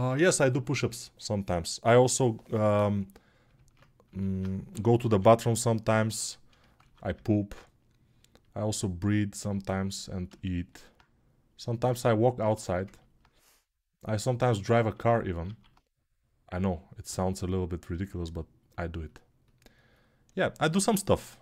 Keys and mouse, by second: 4.5 g, 6.4 alt+], 6.7 alt+q.